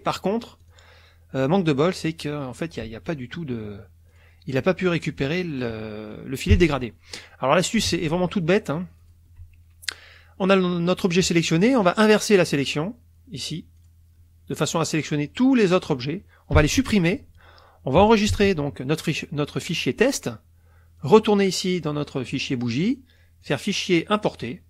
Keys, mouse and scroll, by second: 0.6 click, 2.0 click, 4.1 click, 5.0 click, 6.5 Delete, 8.0 alt+Tab, 9.0 alt+click, 11.8 click, 13.8 click, 16.6 Delete, 18.3 ctrl+s, 21.0 click, 21.7 click, 22.3 click, 23.4 click, 24.4 click.